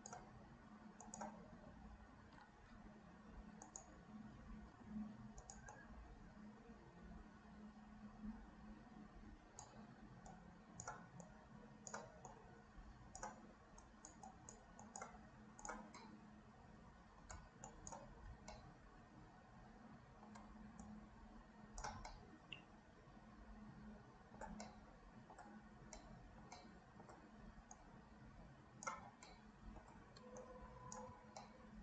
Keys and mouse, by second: 1.1 click, 5.7-9.7 drag, 10.3 shift+click, 11.3 shift+click, 12.3 click, 13.8 click, 14.4 click, 15.6 click, 16.1-17.3 middle drag, 17.7 shift+click, 18.6-20.4 middle drag, 20.8-21.9 shift+drag, 22.2-24.5 middle drag, 24.7 shift+middle click, 26.0 middle click, 26.7 middle click, 27.7-28.9 drag, 29.4 middle click, 30.5 shift+right click, 31.6-31.8 middle drag.